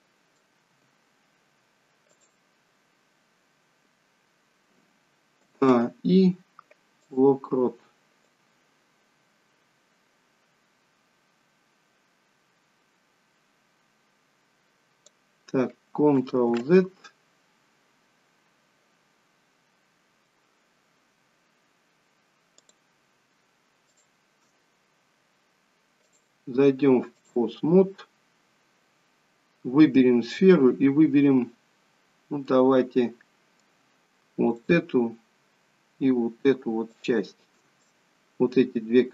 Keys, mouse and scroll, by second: 0.8 g, 5.4 a, 5.6 i, 8.3 click, 16.9 ctrl+z, 22.6 click, 23.8 shift+click, 26.0 click, 28.2-29.1 scroll up 2, 32.4 middle click, 34.4 shift+click, 37.9 shift+click, 37.9 middle click.